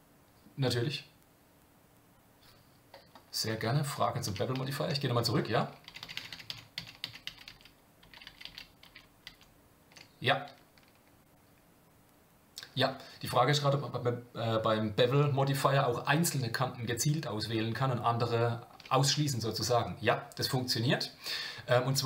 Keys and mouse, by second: 4.3-10.0 ctrl+z.